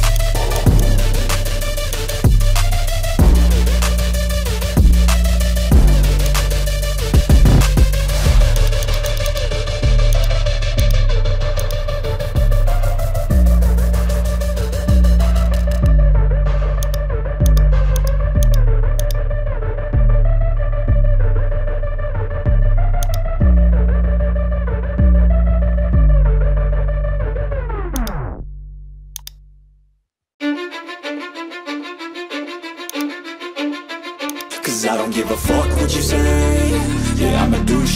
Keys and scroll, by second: 0.4 typing, 1.8-2.8 typing, 13.3 ctrl+alt+z, 13.4 ctrl+alt+z, 13.7 ctrl+alt+z, 13.8 ctrl+alt+z.